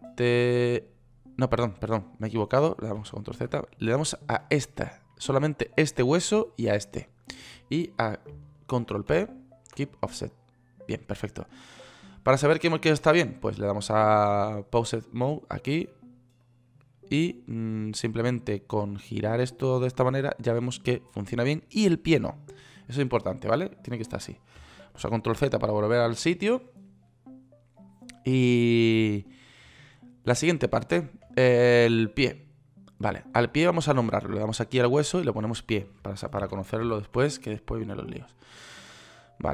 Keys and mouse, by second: 3.4 ctrl+z, 9.5 ctrl+p, 25.5 ctrl+z.